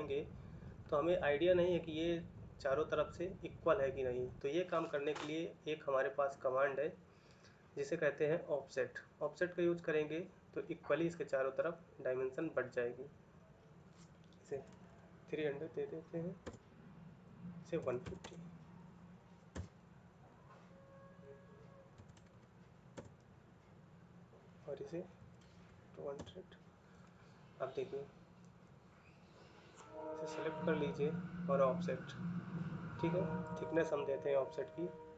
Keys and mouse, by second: 15.3 typing, 16.3 Return, 18.7 typing, 19.3 Return, 22.7 typing, 22.8 Return, 26.0 Return, 26.0 typing.